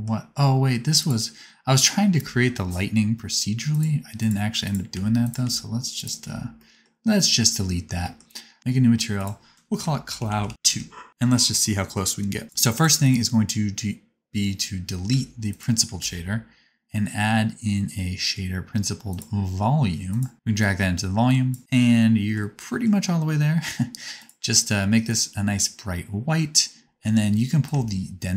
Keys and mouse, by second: 0.9 click, 0.9 right click, 3.7 click, 3.7 right click, 4.1 click, 4.1 right click, 4.9 x, 5.2 click, 5.2 middle click, 5.2 right click, 5.4 x, 5.9 click, 5.9 middle click, 5.9 right click, 6.4 x, 8.6-12.8 drag, 8.6-12.8 middle drag, 8.6-12.8 right drag, 13.0-15.1 drag, 13.0-15.1 middle drag, 13.0-15.1 right drag, 15.1 x, 15.4 click, 15.4 middle click, 15.4 right click, 15.9 shift+a, 20.6-27.7 drag, 20.6-24.3 middle drag, 20.6-24.3 right drag.